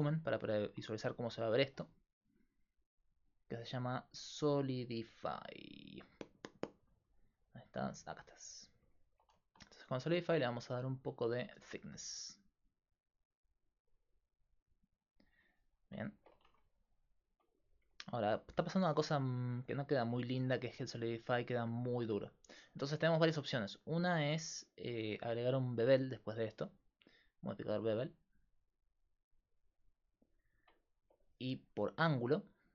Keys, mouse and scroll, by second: 0.8-3.1 middle drag, 3.1-5.4 drag, 8.7 middle click, 11.3 middle click, 12.9 click, 15.8 middle click, 16.5 Tab, 19.1 middle click, 24.4-29.5 drag, 30.5 middle click.